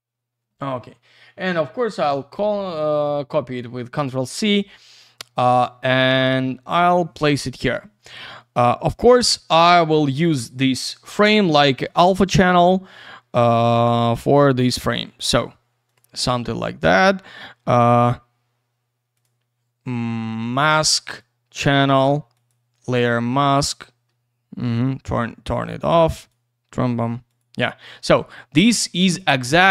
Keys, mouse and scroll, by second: 1.7 click, 1.9 click, 5.4 click, 5.5 click, 6.5 ctrl+v, 13.5 click, 13.6 click, 14.0 click, 14.1 click, 14.8 click, 14.9 click, 15.9 click, 15.9 click, 19.1 click, 19.2 click, 21.2 click, 22.3 click, 22.5 click, 22.9 ctrl+v, 24.7 click, 24.8 click.